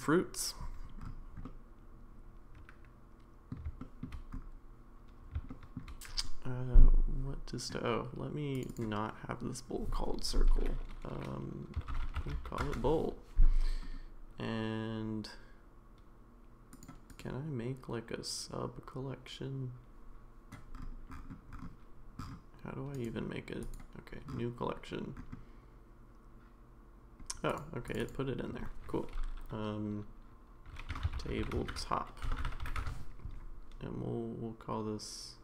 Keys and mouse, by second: 1.4-3.5 middle drag, 3.8 shift+middle drag, 5.5 shift+middle drag, 8.5 click, 8.7-13.5 drag, 16.7 click, 17.1-20.0 right drag, 23.1 right click, 27.5 click, 28.0-33.6 drag.